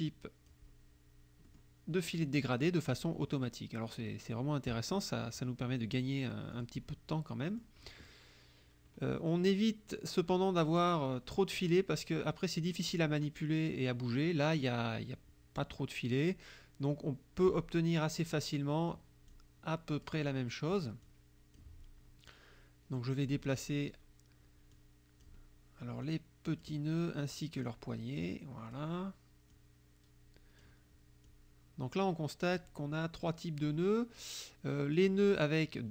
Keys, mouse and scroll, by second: 1.5 middle click, 2.1 click, 6.6 click, 7.5 middle click, 13.0-14.8 drag, 16.3-17.7 drag, 18.4 click, 19.3 click, 20.9 middle click, 21.1 click, 23.3 click, 24.8 click, 26.1 click, 27.4 click, 28.3 click, 29.6-30.9 drag, 31.3-32.8 drag, 35.0 click.